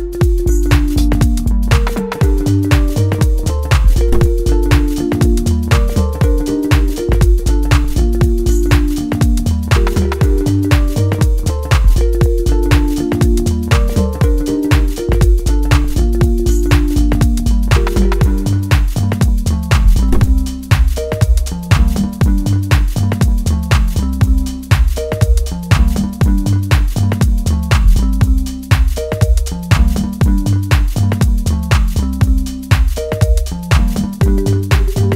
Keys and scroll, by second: 5.8 ctrl+space.